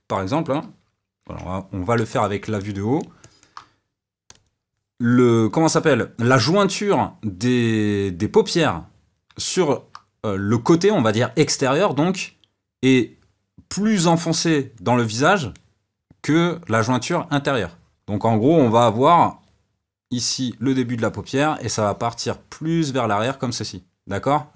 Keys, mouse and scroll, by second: 1.2 KP_7, 2.1-4.3 shift+middle drag, 4.3-24.5 drag.